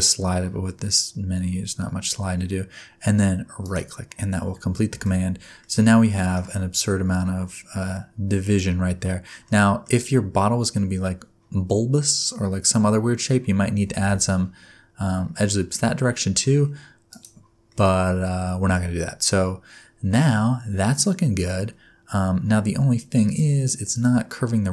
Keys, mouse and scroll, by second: 5.0 alt+a, 5.6 middle click, 9.5 middle click, 14.0 ctrl+r, 17.6 scroll down 1, 17.7 middle click, 18.6 Tab, 23.2 click, 23.9 click.